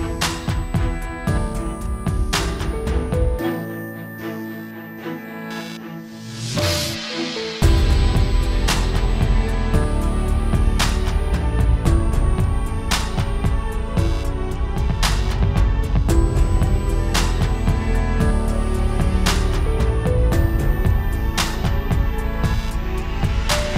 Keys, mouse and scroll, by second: 0.4 scroll down 4, 0.5 alt+a, 0.6 scroll up 2, 0.7 middle click, 1.2 scroll down 2, 1.4 shift+middle click, 1.5 scroll up 1, 1.6 middle click, 2.3-2.6 scroll up 3, 2.5 click, 5.1 scroll up 1, 5.3 middle click, 5.7 /, 5.8 scroll up 5, 6.0 middle click, 6.3 shift+middle click, 6.4 middle click, 7.2-8.1 scroll down 1, 8.1 /, 8.5 alt+a, 8.6 scroll up 1, 8.9 click, 9.0 scroll down 1, 9.1 shift+middle click, 9.8 t, 12.4 alt+a, 12.4 scroll up 1, 12.5 middle click, 12.7-13.1 scroll down 4, 12.8 shift+middle click, 13.1 middle click, 13.2-13.5 scroll up 5, 13.3 middle click, 13.5 click, 13.7 shift+middle click, 13.9 scroll up 1, 14.3 r, 15.5 click, 17.2 middle click, 17.2 s, 17.6 click, 18.3 click, 18.9-19.3 scroll down 5, 19.0 alt+a, 19.2 shift+middle click, 19.3 scroll up 2, 19.4 middle click, 19.6 scroll down 2, 19.7 shift+middle click, 19.8 scroll up 2, 19.9 middle click, 20.2 middle click, 20.6 click.